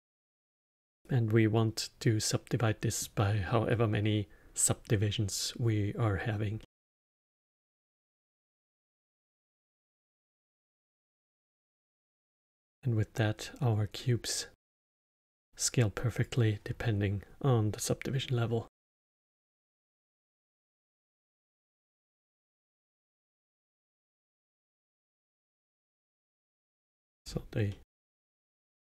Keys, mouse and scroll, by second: 6.5-10.2 middle drag, 10.2 click, 12.3-16.1 middle drag, 16.1-19.1 drag, 20.9-24.0 drag, 24.1-26.5 drag, 26.5-27.2 alt+middle drag, 27.2 scroll up 5, 27.6-28.8 middle drag.